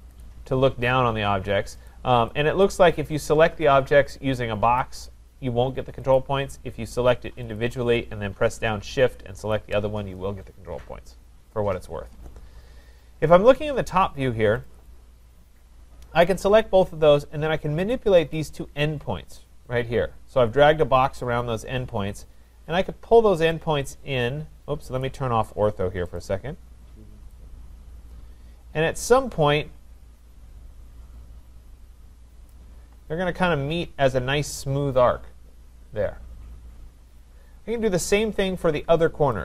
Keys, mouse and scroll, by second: 0.2 click, 1.9 click, 2.6 click, 4.8 click, 6.1 click, 7.6 click, 9.5 shift+click, 14.7 click, 14.9 click, 15.7 middle click, 15.8 middle click, 16.0 middle click, 16.2 middle click, 18.3 click, 25.0 click, 26.2 click, 32.5 click, 38.6-39.4 scroll, 39.3 click.